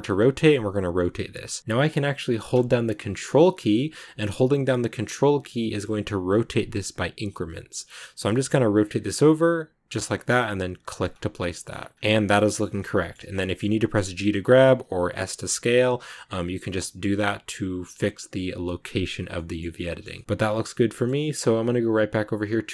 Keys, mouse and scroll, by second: 11.9-13.7 middle drag, 13.7 g, 14.9 s, 19.2 middle click, 20.2 scroll up 1, 20.2 click, 20.7-22.7 shift+middle drag.